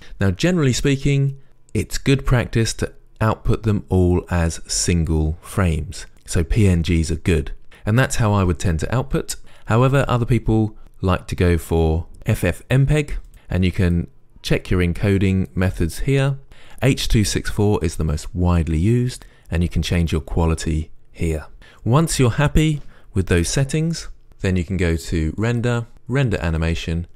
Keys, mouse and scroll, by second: 0.0 click, 13.3-27.1 drag.